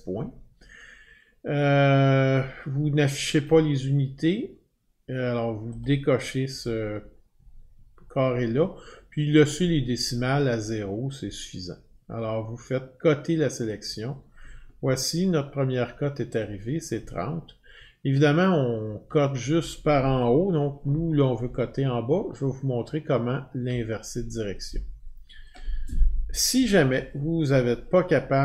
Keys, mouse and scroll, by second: 3.4 click, 5.8 click, 13.6 click, 16.4 click, 16.9 click, 19.2 click, 21.9-23.6 Up, 25.5 Up, 25.5 click.